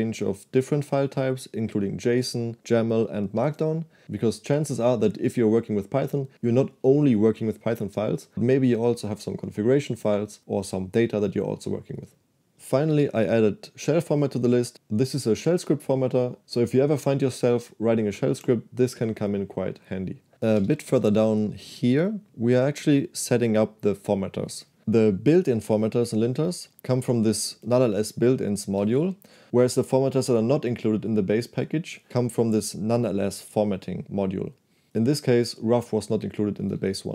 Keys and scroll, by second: 12.7 j, 13.0 shift+v, 20.7-21.9 typing, 26.2 j, 26.4 j, 26.6 j, 28.6-29.5 typing, 32.7 shift+v, 33.6 k.